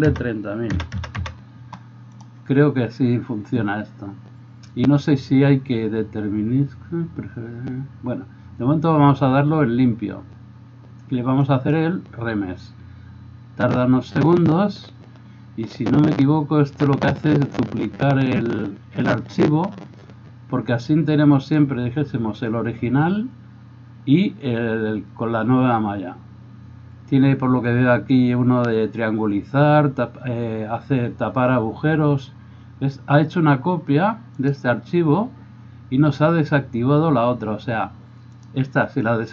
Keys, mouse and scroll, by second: 0.9 KP_0, 2.2-11.5 middle drag, 11.5-34.6 drag, 34.6-38.3 middle drag, 38.3 click, 38.6-39.3 middle drag.